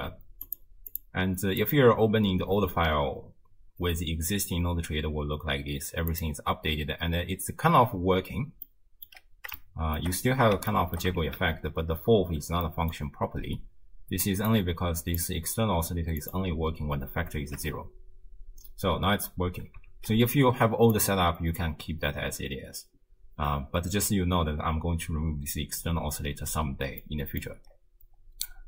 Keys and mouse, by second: 0.9 click, 1.6 click, 6.1 click, 7.7 space, 8.7-9.1 drag, 9.7-10.0 shift+drag, 10.7 shift+drag, 11.2 shift+space, 12.4 space, 12.7-13.0 drag, 14.5 click, 16.2 click, 17.5 shift+space, 19.5 space, 21.0 click, 27.0 middle click.